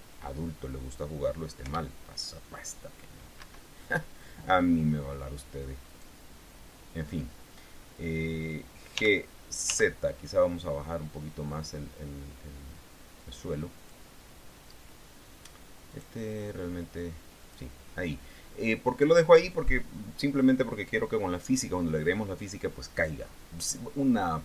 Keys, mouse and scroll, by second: 2.0 p, 3.8 Escape, 6.2 right click, 9.3 g, 10.0 z, 14.2 click, 16.2 right click, 17.0-18.1 drag.